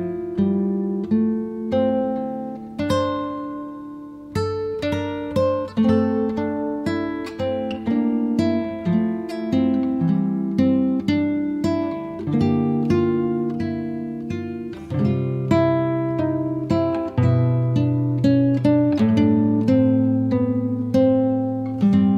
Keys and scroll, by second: 15.1-16.0 typing, 16.3 Return, 20.5-21.8 typing.